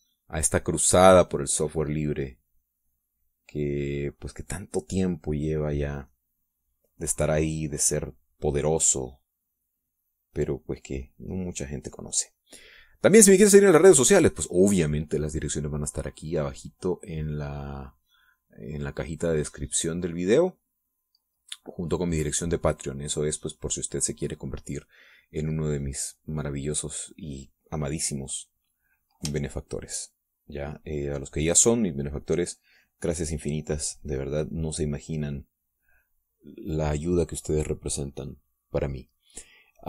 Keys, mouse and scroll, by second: 3.1-6.5 drag, 10.1-13.8 drag, 14.2 middle click, 14.8-16.0 middle drag, 17.6-22.3 drag, 22.9-25.4 drag, 26.0-28.5 drag, 29.9-31.6 drag, 31.7-37.5 shift+drag.